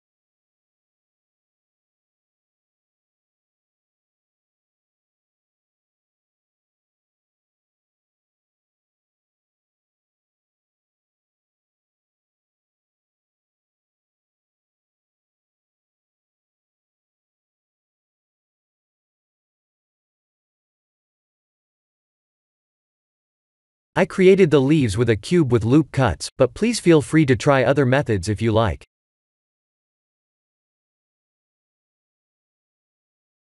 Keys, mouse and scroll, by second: 1.9 click, 2.5 middle click, 2.6 middle click, 2.7 middle click, 4.1-4.8 scroll up 4, 4.9 shift+middle click, 6.7 middle click, 7.7 middle click, 9.3 click, 9.8 s, 12.8 s, 16.6 click, 16.9 middle click, 18.7 middle click, 19.6 middle click, 20.9 KP_1, 21.5 KP_3, 22.1 KP_1, 23.0-23.6 scroll down 3, 23.5 shift+middle click, 24.3 click, 26.2 shift+a, 30.1 g, 32.5 s.